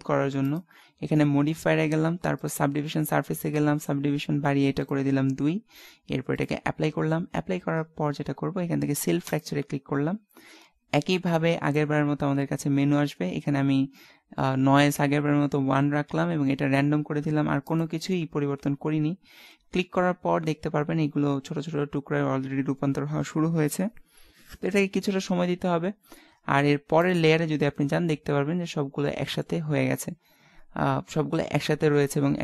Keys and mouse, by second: 4.8-8.3 drag, 9.3 click, 27.2 click, 27.6-29.2 middle drag, 30.2 middle click, 31.0-32.4 middle drag.